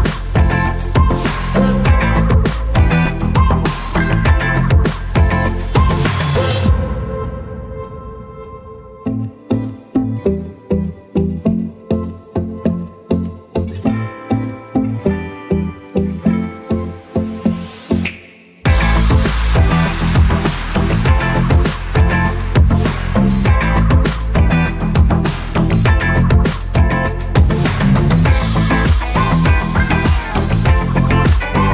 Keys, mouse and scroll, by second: 1.0 click, 5.8 alt+scroll down 1, 7.0 click, 9.9 ctrl+c, 10.6 click, 15.1 ctrl+v, 16.4 click, 19.6 ctrl+z, 20.7 click, 23.8 alt+Num_Lock, 23.9 alt+click, 24.9 alt+shift+click, 25.7 alt+shift+click, 26.8 click, 27.6 alt+scroll up 1, 30.0 a.